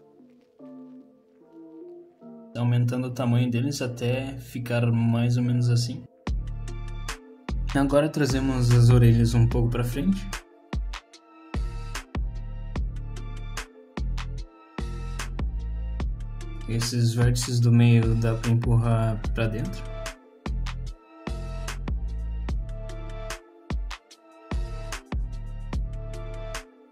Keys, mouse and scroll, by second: 1.6 alt+click, 2.7 s, 4.3 alt+click, 4.7 s, 6.2 middle click, 6.7-7.3 scroll down 2, 7.1 middle click, 7.9 click, 8.0 shift+click, 8.1 shift+click, 8.7 g, 10.6 click, 10.9 click, 11.4 middle click, 11.8 z, 12.6 z, 13.4 click, 14.4 click, 15.0 middle click, 16.0 z, 16.3 middle click, 16.6 middle click, 17.4 click, 18.2 middle click, 19.4 click, 19.9 middle click, 20.6 click, 22.8 middle click, 23.9 click, 24.7 middle click, 25.4 click, 25.9 shift+click, 26.6 shift+click.